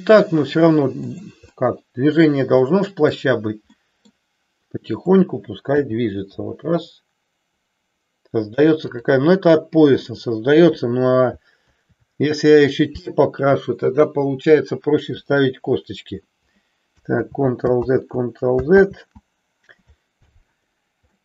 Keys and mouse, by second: 1.5 middle click, 2.6 middle click, 3.8 middle click, 5.0 click, 5.8 g, 9.0 click, 11.6 ctrl+a, 15.1 KP_3, 17.4 ctrl+z, 17.9 ctrl+z, 19.0 ctrl+z, 21.1 middle click.